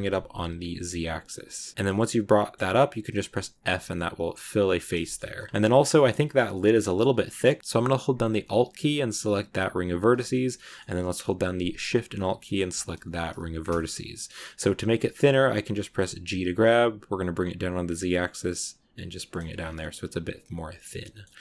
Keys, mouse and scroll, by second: 1.8 middle click, 2.4-3.5 scroll up 1, 3.5 f, 3.8 middle click, 4.7 scroll up 1, 4.9 shift+middle click, 5.1 scroll down 2, 5.2-9.8 shift+middle drag, 9.8 alt+right click, 10.2 scroll up 1, 10.2-12.9 middle drag, 12.9 alt+shift+right click, 13.5 scroll down 1, 13.6 middle click, 14.1 scroll down 1, 14.3-16.2 middle drag, 16.2 g, 19.4 scroll down 2, 19.7-21.4 middle drag.